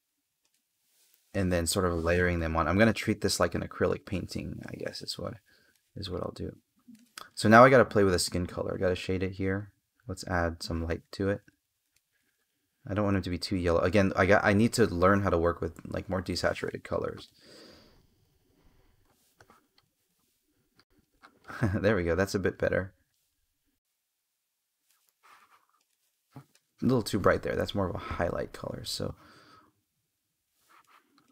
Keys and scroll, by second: 1.0 space, 3.1 space, 4.4 space, 11.7 space.